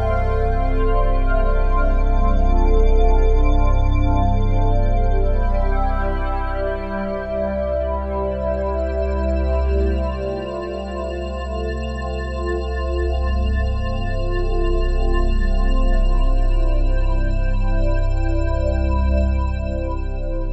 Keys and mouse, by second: 0.6 click, 5.0 click, 7.2 click, 8.4 click, 8.6 click, 9.9 click, 10.4 click, 13.7 click, 15.0 click, 16.8-18.7 drag, 19.4 click, 19.8-20.5 drag.